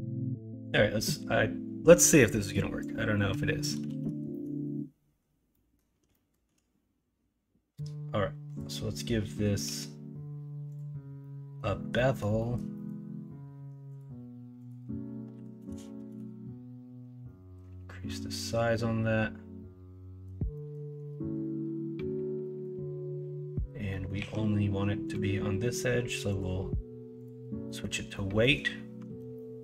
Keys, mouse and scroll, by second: 3.6 click, 3.8 ctrl+z, 4.3 middle click, 5.5 middle click, 6.1 shift+middle click, 11.2 middle click, 11.9 middle click, 12.3 middle click, 12.8 middle click, 17.2 middle click, 18.0 middle click, 18.7 middle click, 19.5 middle click, 19.5 right click, 19.7 middle click, 20.5 right click, 22.4 middle click, 23.9 middle click, 24.1 q, 27.1 click, 27.6 middle click, 28.1 middle click, 29.0 alt+z, 29.3 middle click.